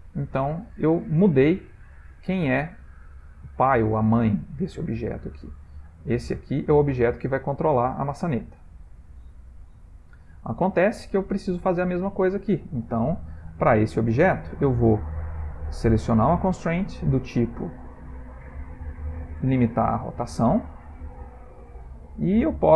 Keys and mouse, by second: 0.5 ctrl+middle click, 1.5 click, 1.9 r, 6.3 click, 6.7 r, 9.8 ctrl+z, 10.3 ctrl+z, 11.1 ctrl+middle click, 13.5 click, 16.0 click, 16.6 click.